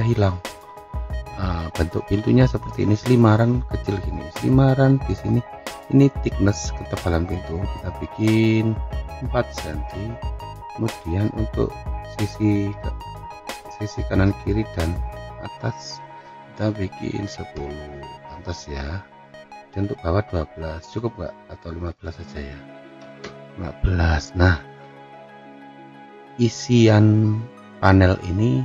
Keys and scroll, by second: 10.7 Return, 17.0 1, 17.3 0, 17.6 Return, 22.4-23.4 typing.